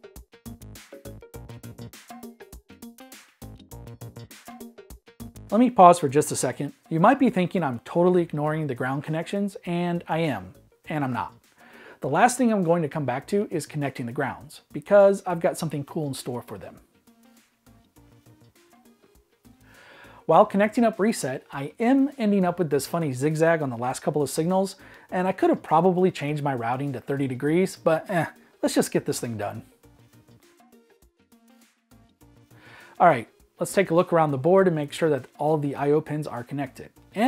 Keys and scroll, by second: 28.8 Escape, 32.4 super+s.